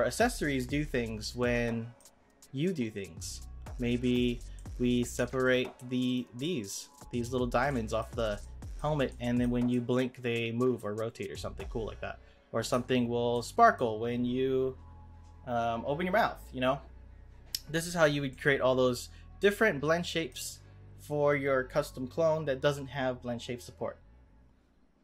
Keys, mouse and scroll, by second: 1.2-4.0 middle drag, 4.0 click, 4.6 middle click, 5.1 Tab, 5.4 click, 6.0 click, 6.4-12.7 middle drag, 12.7 Tab, 13.1 scroll down 2, 13.3-16.4 middle drag, 18.2-22.5 middle drag.